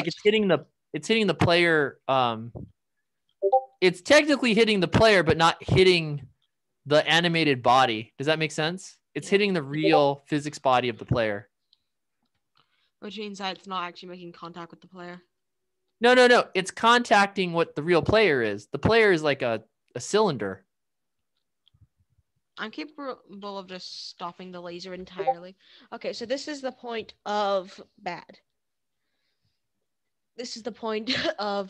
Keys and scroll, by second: 0.0-4.3 typing, 5.8-16.2 typing, 17.5 w, 18.9 s, 20.4-24.9 typing.